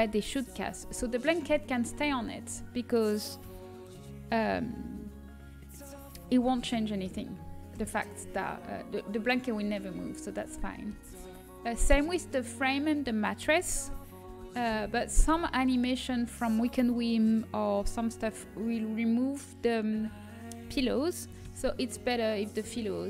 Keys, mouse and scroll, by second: 2.0 l, 3.4 g, 9.1-10.3 middle drag, 11.0 a, 15.1 l, 16.0 l, 17.5 click, 21.0 g.